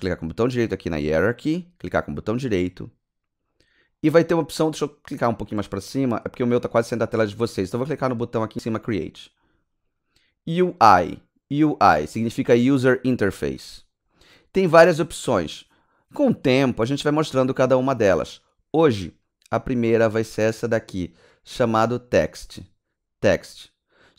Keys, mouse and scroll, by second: 1.2 right click, 8.8 click, 9.3 click.